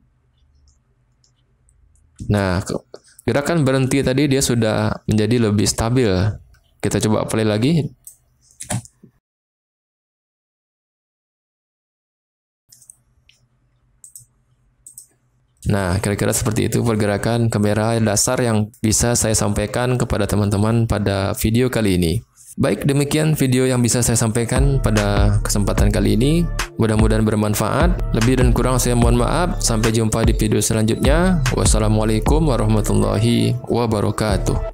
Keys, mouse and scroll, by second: 2.2 space, 6.8-8.1 drag, 8.7 space, 12.0 space, 14.1-15.0 drag, 15.5 space.